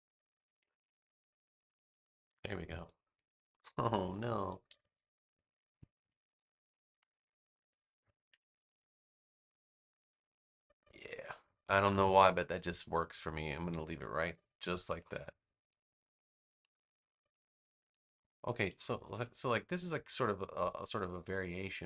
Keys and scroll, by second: 2.5 space, 4.6 super+-, 5.7 space, 8.2 super+v, 14.7 space.